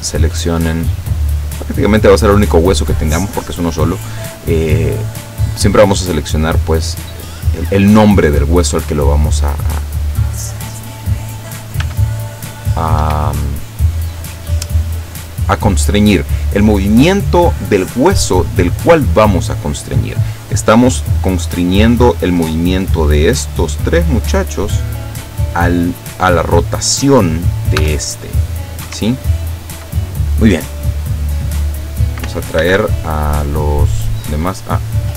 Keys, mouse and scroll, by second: 0.6 click, 0.8 middle click, 1.4 click, 1.6-10.0 middle drag, 10.0 right click, 11.9 r, 13.1 Escape, 23.0 right click, 23.7 right click, 24.2 right click, 25.0 right click, 27.8 r, 28.9 Escape, 30.3 scroll down 2, 30.7 scroll up 2, 32.7 alt+h, 34.8 click.